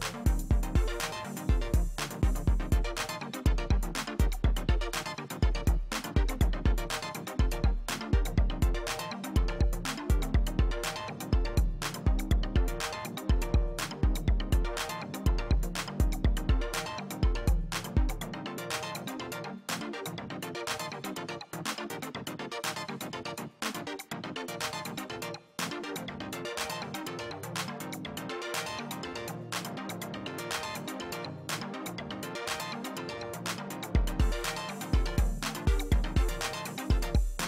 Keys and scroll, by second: 12.1 Delete, 12.9 ctrl+alt+z, 15.7 space, 17.7 Delete, 18.8 space, 22.2 space.